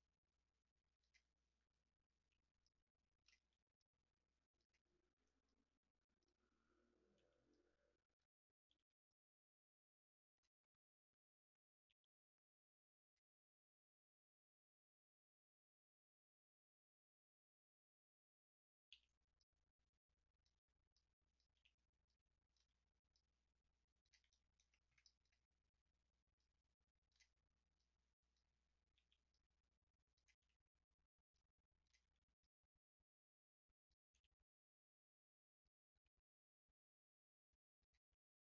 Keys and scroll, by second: 2.2 w, 3.3 r, 5.0 w, 7.1 r, 8.6 w, 11.8 r, 13.2 w, 15.7 r, 18.9 w, 20.5 r, 21.5 w, 22.6 r, 27.2 w, 28.9 r, 30.3 w, 31.9 r, 34.1 w, 36.1 r.